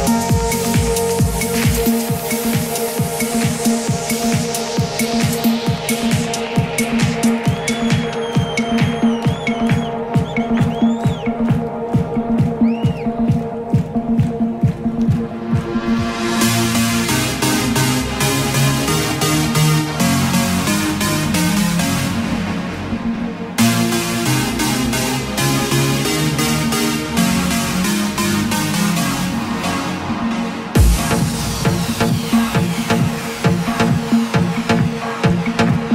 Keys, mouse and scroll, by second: 5.3 p, 6.0 click, 6.6 p, 10.8 KP_6, 11.1 KP_4, 11.2 KP_0, 12.7 click, 14.5 KP_3, 14.7 KP_6, 14.9 KP_0, 16.5 click, 18.0 KP_0.